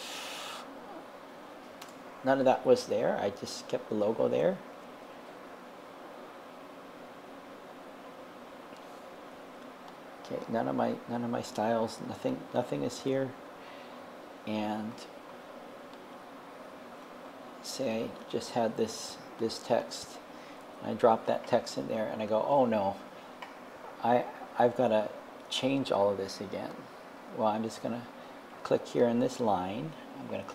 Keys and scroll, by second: 0.5 super+a, 1.8 BackSpace, 18.0 super+c, 20.6 super+v.